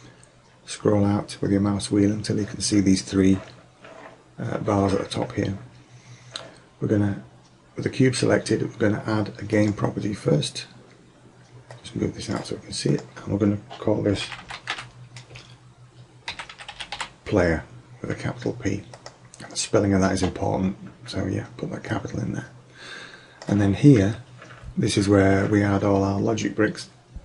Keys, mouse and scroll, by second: 9.6 click, 14.7 click, 21.9-23.8 drag.